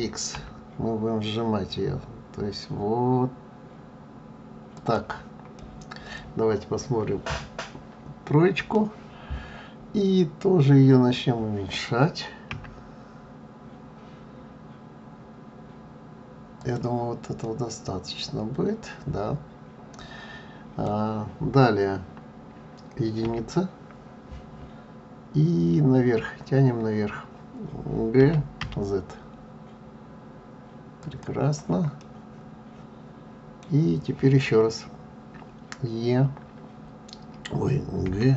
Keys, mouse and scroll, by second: 5.6 middle click, 17.4 middle click, 32.0 middle click.